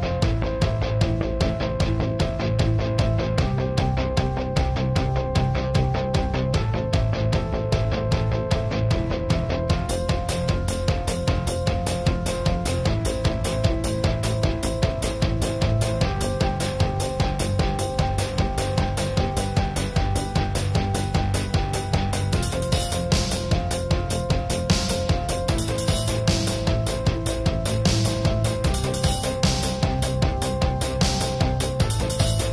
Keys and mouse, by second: 1.1 drag, 1.3 KP_3, 1.6-2.8 drag, 2.8 middle click, 3.0 click, 3.9 middle click, 4.0-5.2 drag, 5.2 middle click, 5.3 ctrl+s, 5.6-6.0 KP_6, 6.3 KP_4, 8.2-10.1 drag, 10.0 ctrl+s, 10.1-10.4 KP_6, 10.5 KP_4, 11.0 click, 13.2 ctrl+s, 14.4 ctrl+s, 17.6 ctrl+s, 18.3 middle click, 18.7 click, 19.1 click, 19.8-20.6 middle drag, 20.3 ctrl+s, 20.6-21.6 drag, 21.3 middle click, 21.5 shift+space, 21.9 ], 22.1 ], 22.8 click, 23.7 middle click, 24.1-24.9 middle drag, 25.0 middle drag, 25.2-26.7 drag, 26.7-27.1 middle drag, 27.3 middle click, 27.5-28.9 drag, 29.0-29.7 middle drag, 29.7-32.2 drag, 32.2 ctrl+s, 32.4 click.